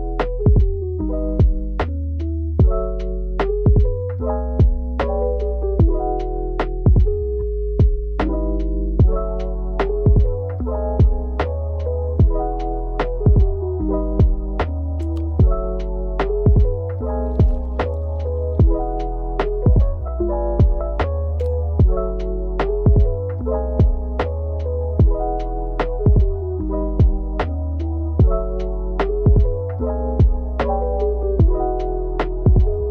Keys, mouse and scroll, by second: 0.1 ctrl+r, 0.2 middle click, 0.2 Tab, 0.5 scroll up 3, 0.6-2.4 typing, 0.7 middle click, 0.8 click, 1.4 click, 2.9 scroll up 1, 3.0 click, 3.1 Tab, 3.2 ctrl+r, 3.3 ctrl+r, 3.4 scroll down 4, 3.6 middle click, 3.7-4.0 scroll up 8, 4.2 Tab, 4.5 middle click, 4.7 Tab, 4.8 middle click, 5.2 scroll down 2, 5.4 click, 5.7 scroll up 8, 5.8 ctrl+KP_Add, 6.2 ctrl+z, 6.4 alt+click, 6.6 middle click, 6.6 KP_1, 6.7 alt+shift+click, 6.8 ctrl+KP_Add, 7.0 scroll down 2, 7.1 scroll up 2, 7.3 shift+middle click, 7.4 scroll down 2, 7.6 alt+click, 8.1 click, 8.2 Delete, 8.3 middle click, 8.4 click, 8.4-14.0 typing, 8.5 middle click, 8.8 scroll up 4, 9.1 click, 9.5 click, 9.7 Delete, 10.0 click, 10.5 Tab, 10.5 Tab, 10.6 ctrl+r, 10.7 ctrl+r, 10.8 click, 11.3 click, 11.5 Tab, 12.0 click, 12.7 click, 12.9 middle click, 13.2 scroll up 3, 13.5 middle click, 13.9 middle click, 14.2 shift+middle click, 14.3 scroll up 1, 14.4 click, 14.5 middle click, 14.6 click, 14.8 ctrl+z, 17.6 Tab, 17.7 e, 17.8 s, 17.8 click, 18.1 s, 18.2 middle click, 18.4 scroll up 4, 19.3 scroll, 19.3 click, 20.4 scroll, 22.5 scroll up 3, 22.6 scroll down 3, 22.9 click, 23.0 click, 23.3 scroll down 1, 23.6-24.1 scroll up 4, 23.7 click, 23.9 middle click, 24.1 click, 24.2 middle click, 24.5 click, 24.5-25.2 typing, 24.6 scroll up 1, 24.8 middle click, 24.9 middle click, 25.4 middle click, 25.5 click, 27.0 click, 27.3 scroll down 4, 27.3 shift+middle click, 27.5 scroll up 3, 27.9 alt+shift+click, 28.2 ctrl+KP_Add, 28.4 middle click, 28.6 ctrl+KP_Add, 28.7-29.8 typing, 29.1 click, 29.5 ctrl+z, 29.6 ctrl+KP_Add, 29.9 scroll down 3, 30.0 shift+middle click, 30.3 click, 30.5 click, 30.6 Tab, 30.7 scroll down 1, 30.9 click, 31.0 Tab, 31.2 click, 31.4 Tab, 31.4 click, 31.7 middle click, 31.8 scroll up 4, 31.9 ctrl+KP_Add, 32.0 Tab, 32.3 scroll up 5, 32.6-32.9 typing, 32.7 scroll down 4.